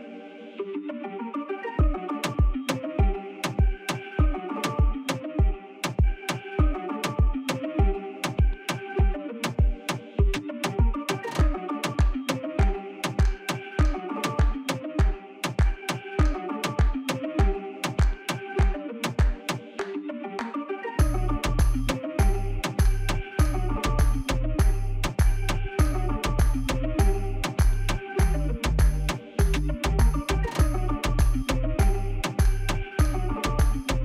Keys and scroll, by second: 5.5 Tab, 9.7 Tab, 11.2 e, 11.9 s, 12.9 shift+z, 15.2 shift+z, 20.7 ctrl++, 22.1 ctrl++, 26.0 Tab, 26.8 Tab, 29.9 Tab, 33.4 g, 33.5 z.